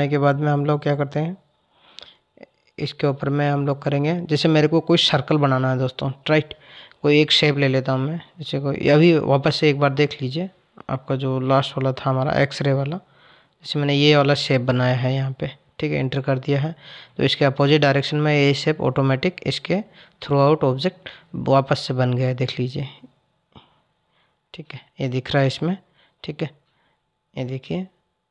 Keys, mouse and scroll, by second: 6.7-9.8 drag, 15.1 click, 17.0 click, 18.0 click, 20.4 click, 24.9 scroll down 2.